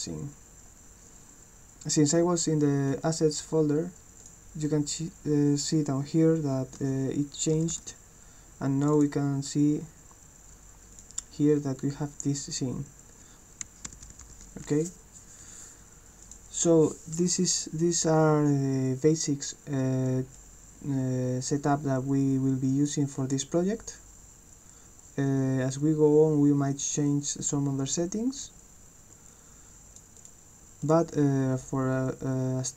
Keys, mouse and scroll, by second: 4.2 click, 8.9 click, 10.9 click, 16.2 click, 20.4-22.9 drag, 23.3-28.4 drag, 29.3 click, 30.1 click, 30.8 click.